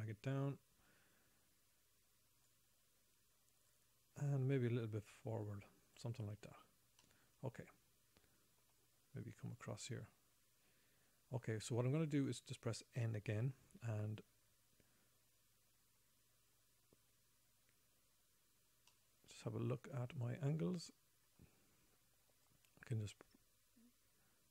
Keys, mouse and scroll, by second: 4.1 click, 7.5 middle click, 10.0 click, 13.7 n, 19.3 middle click, 21.4 middle click, 22.8 click.